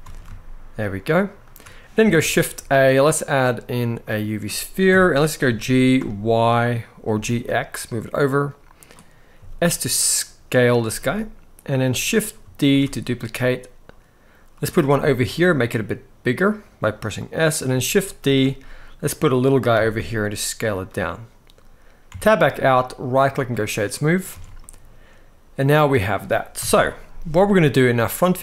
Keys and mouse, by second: 1.1 shift+click, 1.9 shift+a, 4.6 KP_7, 5.2 g, 5.7 y, 6.9 x, 9.1 s, 10.3 click, 10.5 g, 11.4 click, 12.4 shift+d, 14.9 s, 16.9 click, 17.9 shift+d, 19.4 s, 21.8 Tab, 22.8-23.2 right drag, 23.6-23.9 middle drag, 24.0 alt+a, 24.3-25.3 middle drag, 26.3 KP_1, 28.3-28.4 shift+middle drag.